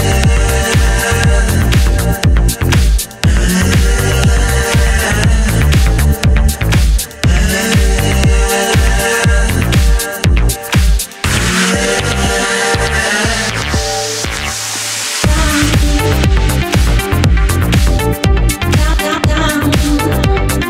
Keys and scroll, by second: 15.3 super+c.